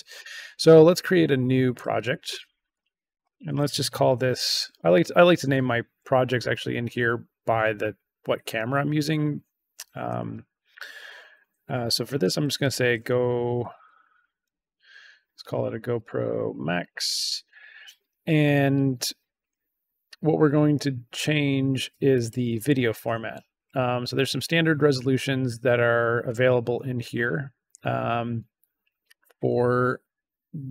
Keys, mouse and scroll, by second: 1.7 click, 2.6 click, 4.0 shift+g, 4.5 o, 12.3-17.3 typing, 22.1 click.